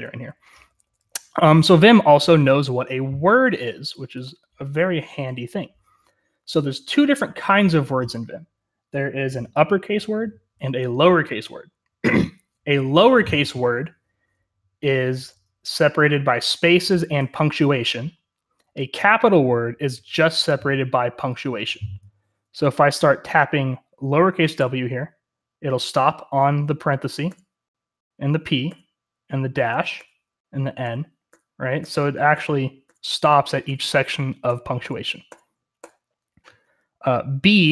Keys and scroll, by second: 0.0-37.7 typing.